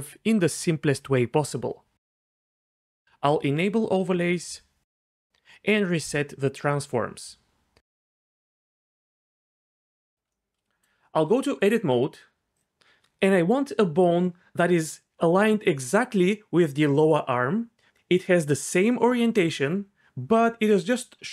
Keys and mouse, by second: 5.3 click, 6.1-8.3 drag, 10.1 middle click, 11.2 Tab, 12.5 click, 20.3-21.3 d.